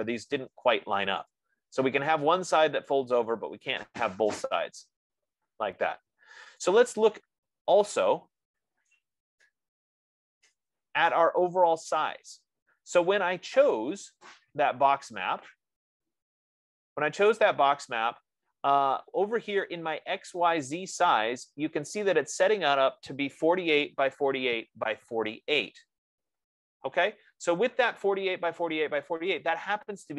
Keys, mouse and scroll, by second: 4.3 right click, 9.7 right click, 11.3 right click, 15.8 right click.